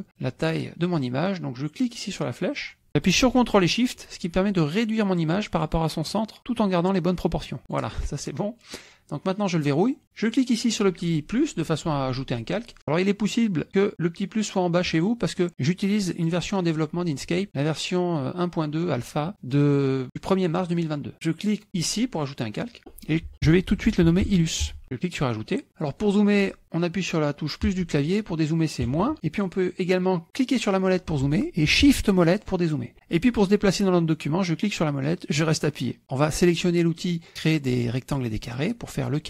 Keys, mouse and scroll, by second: 1.9-7.9 drag, 9.5 click, 15.5 click, 16.3 click, 22.2 click, 23.7 l, 24.0 u, 25.0 click, 27.7 KP_Add, 28.8 KP_Subtract, 30.3 click, 30.8 click, 32.4 shift+click, 34.5-36.0 drag, 38.5 click.